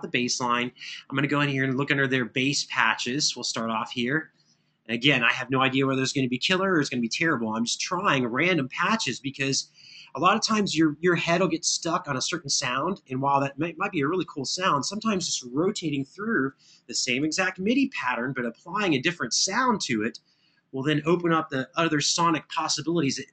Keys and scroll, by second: 17.2 super+=.